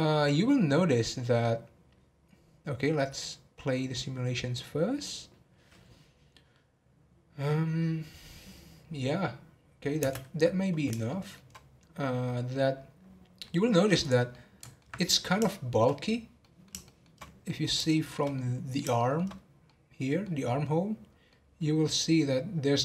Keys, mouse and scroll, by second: 10.1 space, 11.1-12.7 shift+middle drag, 12.7-13.4 scroll up 2, 13.4-14.0 middle drag, 14.0 click, 14.3 middle click, 15.1 scroll down 1, 15.5-17.2 shift+middle drag, 17.2 scroll up 2, 17.4-19.3 middle drag, 19.3 scroll up 1, 19.6-20.9 middle drag, 20.9-21.3 scroll up 1, 21.3-22.8 middle drag.